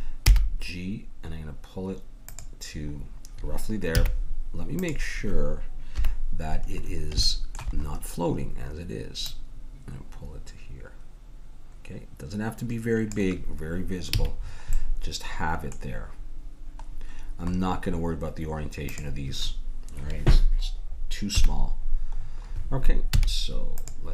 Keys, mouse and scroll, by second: 0.2 g, 4.0 z, 5.9 KP_3, 7.4 middle click, 9.3-11.1 drag, 14.2 a, 14.4 middle click, 18.9-20.8 drag, 21.3 KP_1, 23.2 z.